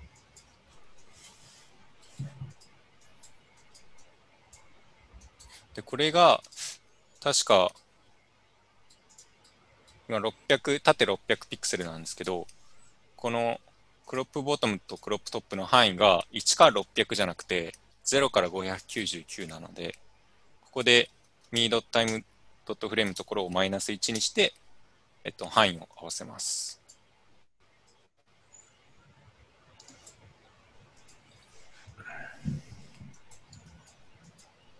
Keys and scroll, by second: 22.1 -, 23.7-24.5 typing, 28.3-29.0 typing.